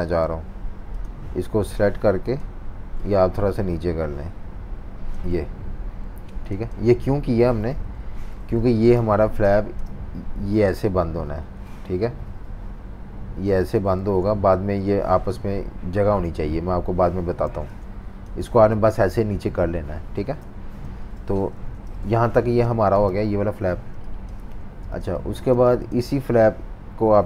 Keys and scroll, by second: 6.2 v, 7.7 -, 8.2 super+-, 8.7-9.7 typing, 14.0 super+z, 17.5-18.6 typing, 20.4 super+y, 20.8 super+y, 21.5 super+-, 21.7 super+-, 22.4 v, 22.6 space, 23.9 space, 25.0 space, 25.5 space.